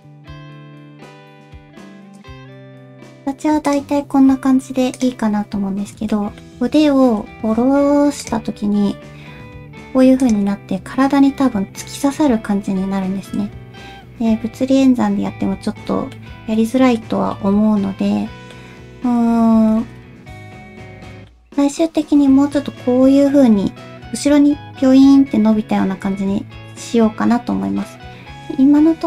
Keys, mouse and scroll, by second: 6.1 shift+middle click, 8.6 r, 10.5-13.4 middle drag, 15.5 ctrl+z, 16.1 middle click, 17.3-18.5 middle drag, 19.7 r, 21.1 middle click, 27.8-29.0 middle drag.